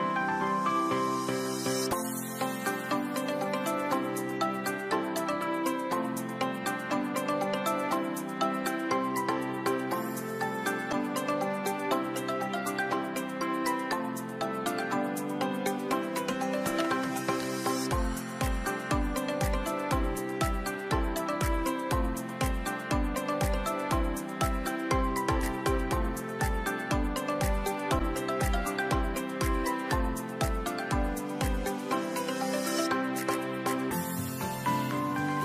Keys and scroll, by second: 10.7 ctrl+g, 13.5-14.1 typing, 14.4 Return, 17.7 ctrl+3, 23.8 shift+Right, 24.1 shift+Right, 24.3 shift+Right, 30.2 shift+Right, 30.4 shift+Right, 30.5 shift+Right, 30.7 shift+Right.